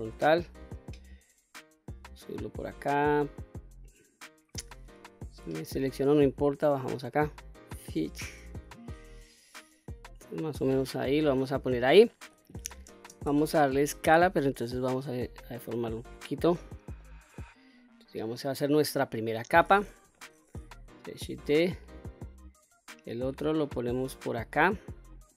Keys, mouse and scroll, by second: 1.5-2.0 drag, 2.8 click, 3.0 click, 4.4 l, 5.4-6.3 drag, 7.3-8.4 drag, 9.2-11.2 drag, 12.5 shift+space, 14.0-16.0 drag, 16.6 middle click, 17.6-18.0 scroll down 1, 18.0-19.1 middle drag, 19.6 KP_1, 20.7 shift+d, 24.7 click.